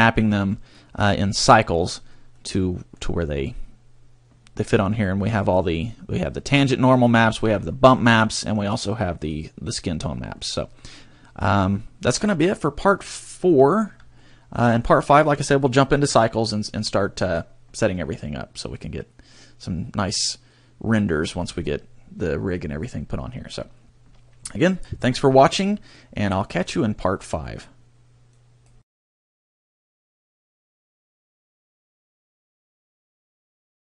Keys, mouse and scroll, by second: 1.7 click, 2.1 click, 7.7 middle click, 15.6 middle click, 19.5 shift+middle click.